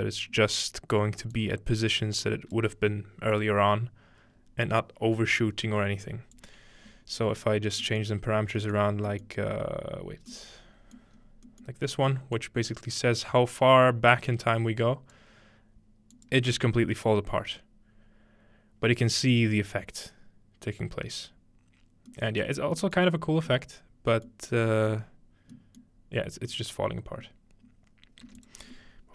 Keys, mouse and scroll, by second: 1.4-4.2 drag, 6.3-7.6 drag, 7.6 scroll down 2, 7.8-9.1 middle drag, 9.1 scroll down 1, 10.0-11.2 scroll down 2, 11.2-12.4 scroll up 3, 12.4-15.2 drag, 16.2 click, 16.4 space, 16.6-18.1 drag, 22.1-23.1 middle drag, 23.1-24.3 scroll up 2, 24.3-24.9 scroll up 1, 25.2-27.1 scroll down 2, 26.4-27.4 middle drag, 28.2 space, 28.4-29.1 drag.